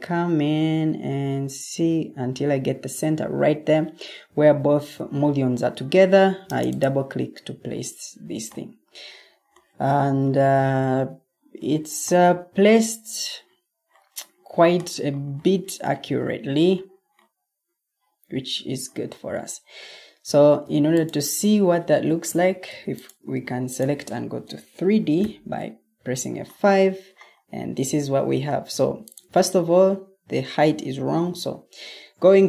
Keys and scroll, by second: 22.2 Escape, 25.1 F5, 31.1 ctrl+t.